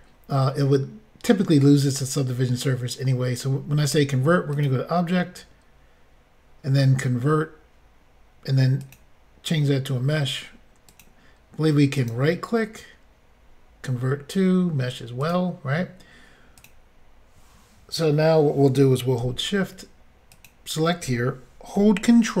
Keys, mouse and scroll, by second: 0.4 middle click, 1.5-2.3 scroll up 1, 2.3-2.6 scroll down 1, 4.5 click, 8.8 click, 10.9 click, 12.0 right click, 15.2 click, 16.6 click, 16.6 click, 20.3 shift+click.